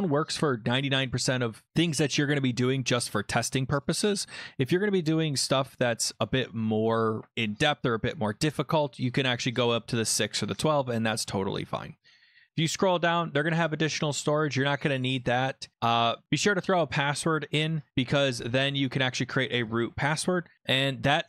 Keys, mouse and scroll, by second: 9.1 click, 10.1 click, 12.0-12.9 scroll down 7, 14.9 scroll up 1, 15.1 scroll, 16.2 click.